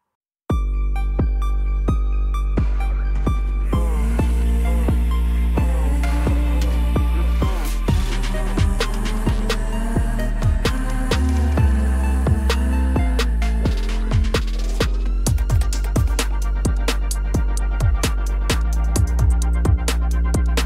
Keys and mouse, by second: 3.6 click, 4.2 middle click, 5.7 shift+click, 6.6 shift+d, 7.0 g, 7.1 z, 9.8 shift+middle drag, 11.1 g, 11.3 z, 13.7 shift+middle drag, 15.2-16.5 middle drag, 18.3 click, 18.8-19.5 middle drag, 20.5 click.